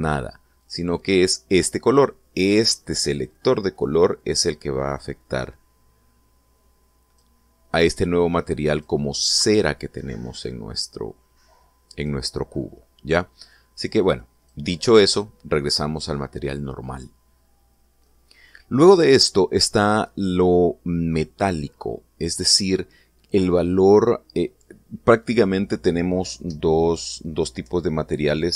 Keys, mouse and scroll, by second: 1.4 click, 3.9 click, 5.0-8.2 drag, 8.5-9.8 drag, 10.1-13.0 drag, 14.3 click.